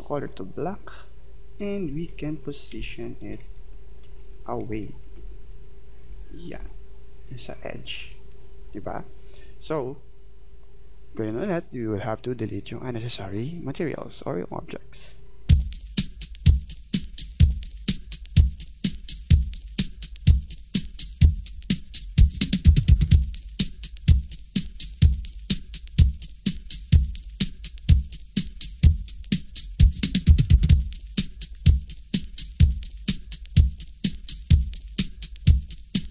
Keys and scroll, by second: 2.7 Left, 5.2 Right, 6.0 Left, 6.6 Right.